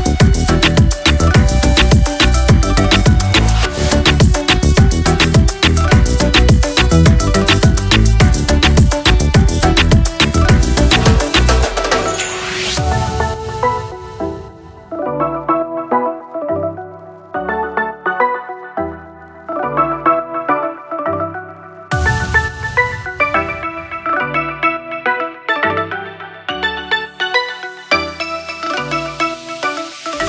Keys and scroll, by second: 1.3 ctrl+s, 8.3 ctrl+c, 9.4 v, 10.5 ctrl+s, 17.5 Delete, 19.2 Delete, 20.8 2, 23.7 3, 26.2 4, 29.6 5.